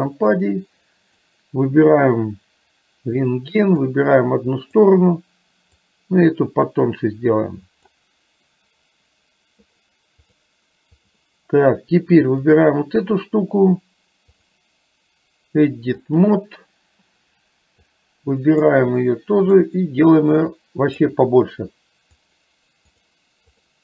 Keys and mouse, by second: 0.2-1.5 drag, 4.0-5.0 drag, 6.0-8.1 drag, 10.3-11.3 drag, 12.6 click, 14.6-16.3 drag, 18.0 click, 19.7-21.2 drag, 22.5 click, 23.7 click.